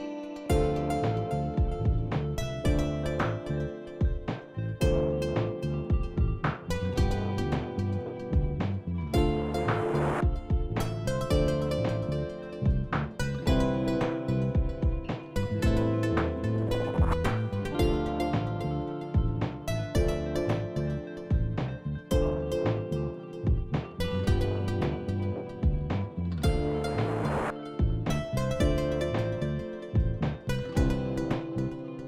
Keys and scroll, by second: 16.7 w, 25.8-27.0 w, 27.9 w.